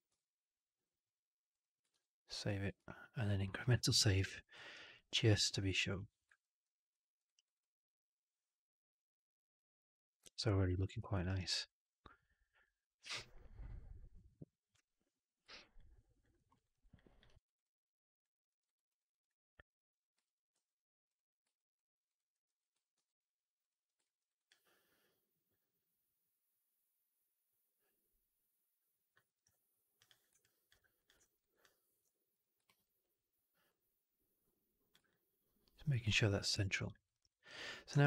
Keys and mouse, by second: 1.8 ctrl+s, 2.7 ctrl+s, 3.7 alt+middle drag, 4.0 alt+right click, 4.1 alt+drag, 4.4 middle drag, 4.6 right drag, 4.8 click, 6.8 alt+middle drag, 7.1 alt+right drag, 7.3 alt+right drag, 7.5-10.6 alt+drag, 10.9 alt+middle click, 11.1 alt+right drag, 11.3 alt+right drag, 11.5-13.0 alt+drag, 15.6-16.1 alt+drag, 16.2 alt+middle click, 16.4 alt+right click, 16.6 alt+right click, 16.8 alt+drag, 17.1 alt+right drag, 17.3 alt+right click, 17.5 alt+click, 18.4 alt+middle click, 18.5 alt+right click, 18.7 alt+click, 19.1 click, 20.4 q, 21.4 alt+drag, 21.9 alt+right click, 22.2 alt+middle drag, 22.8 ctrl+s, 23.9 alt+middle drag, 24.1 alt+right drag, 24.4-29.0 alt+drag, 29.1 alt+middle drag, 29.8 click, 30.3 alt+drag, 30.9 click, 31.1 alt+middle drag, 31.3 alt+right click, 31.5 alt+click, 32.2 click, 32.5 alt+middle drag, 32.7 alt+right drag, 33.6-34.8 drag, 34.9-36.7 alt+drag, 36.9 alt+right drag, 37.1 alt+right click.